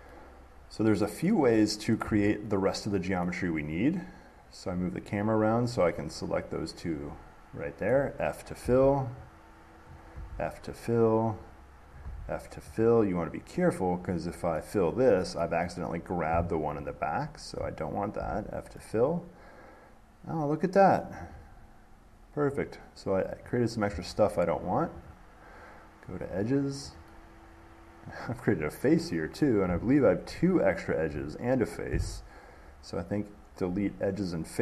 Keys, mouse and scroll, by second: 1.5-3.5 middle drag, 4.9 click, 8.1 middle click, 10.1-12.1 drag, 14.2 click, 15.6 middle click, 17.0 shift+click, 21.2 middle click, 21.6 middle click, 21.6 middle click, 21.7 middle click, 23.7 click, 25.3 click, 26.6 click, 29.6 middle click, 30.5 shift+click.